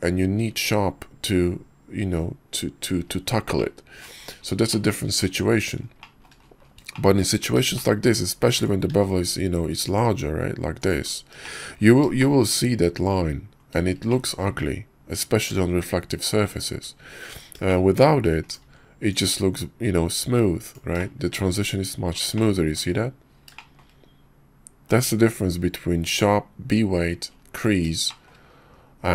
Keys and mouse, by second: 3.6-4.0 drag, 4.7-5.1 shift+middle drag, 6.0 shift+middle click, 6.9 shift+middle click, 7.6 shift+middle click, 8.9 q, 11.4 shift+middle drag, 11.4 shift+drag, 12.2 shift+click, 14.1-14.4 shift+drag, 17.4 middle click, 17.7-18.1 shift+middle drag, 18.5 click, 18.6 q, 21.0-22.2 shift+middle drag, 22.3 shift+middle click, 23.6 shift+middle click, 28.1 shift+middle click, 28.7 KP_5.